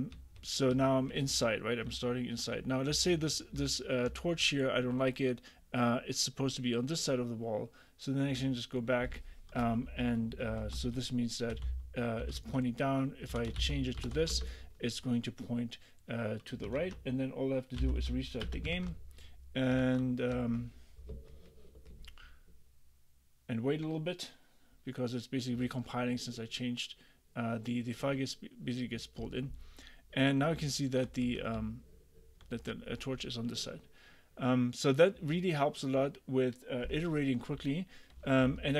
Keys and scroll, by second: 0.2 a, 1.3 d, 2.4 w, 3.0 d, 3.6 w, 4.3 a, 9.9-14.7 typing, 16.8 super+., 17.8 j, 18.5 Return, 18.8 super+`, 30.6 w, 31.3 a, 31.6 w, 38.5 ctrl+u.